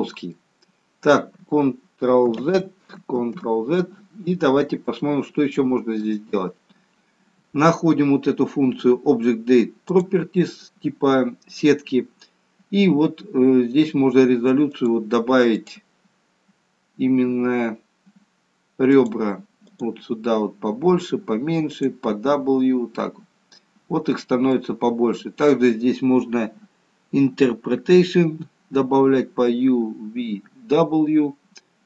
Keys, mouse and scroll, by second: 2.6 ctrl+z, 3.2 ctrl+z, 4.4-5.6 scroll down 3, 4.9 middle click, 9.8 click, 14.7 click, 15.6 click, 18.8 click, 20.3 click, 21.7 click, 23.0 middle click.